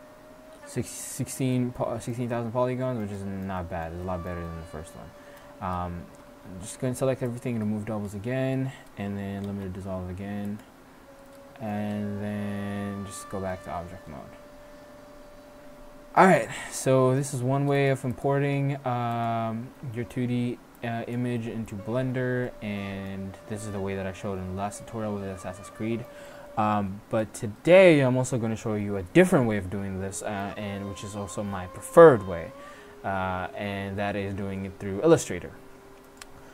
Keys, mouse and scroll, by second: 2.5 middle click, 3.8 middle click, 4.3-4.7 middle drag, 5.2 middle drag, 5.5 Tab, 6.2 a, 6.4 a, 7.4-9.3 drag, 9.5 x, 11.4 click, 12.0 Tab, 13.7 middle click, 16.6-17.1 middle drag, 17.4 middle click, 17.5 shift+a, 18.5 s, 20.8-22.5 drag, 22.5 middle drag, 24.4-24.8 middle drag, 25.1-25.5 middle drag, 26.6-35.2 middle drag.